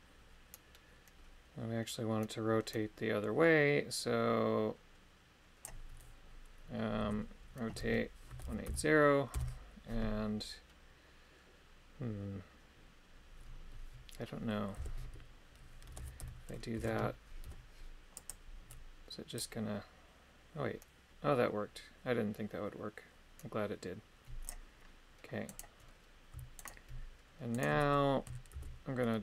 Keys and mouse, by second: 7.0 r, 8.3 KP_1, 8.4 KP_8, 8.6 KP_0, 9.3 Return, 14.8 r, 15.9 KP_1, 16.0 KP_8, 16.2 KP_0, 16.8 Return, 17.4 i, 19.4 click, 25.5 right click, 26.6 shift+right click, 27.5 shift+right click, 28.5 shift+d.